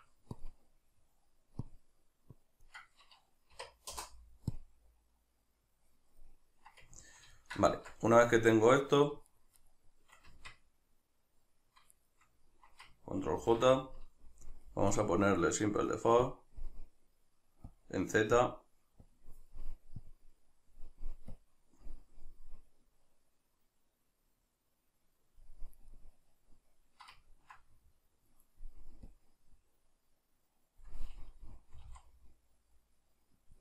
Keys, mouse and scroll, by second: 0.4-6.3 drag, 6.3-9.3 middle drag, 7.7 Tab, 9.3 shift+right click, 9.6 shift+right click, 10.3 Tab, 12.0-13.5 shift+right drag, 13.5 ctrl+j, 15.0-25.9 drag, 25.9-29.1 middle drag, 29.1-33.6 drag, 31.8 r.